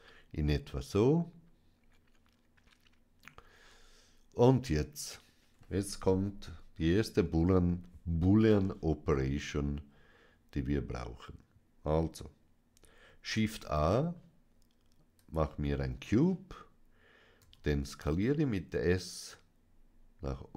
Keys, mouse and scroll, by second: 0.6-3.1 middle drag, 7.1 KP_1, 13.2 shift+a, 15.0 click, 17.3 s.